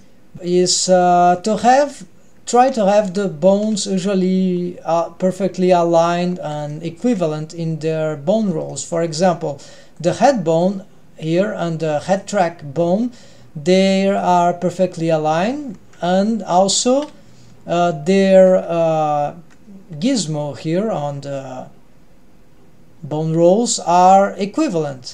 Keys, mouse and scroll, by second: 0.1 middle click, 0.5-1.2 middle drag, 1.7 KP_3, 3.2 ctrl+KP_3, 4.6 scroll up 1, 6.2-6.7 scroll up 2, 6.7-7.2 shift+middle drag, 8.7-9.2 shift+middle drag, 10.0 click, 10.6 drag, 12.1 click, 14.2 click, 16.3 KP_3, 16.9 KP_1, 18.8 KP_8, 20.2-20.9 scroll down 1.